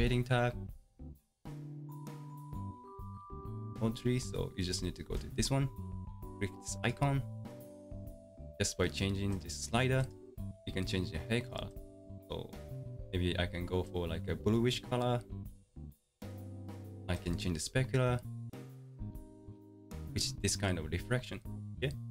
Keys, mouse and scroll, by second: 1.3 click, 9.4-11.7 drag, 18.6 click.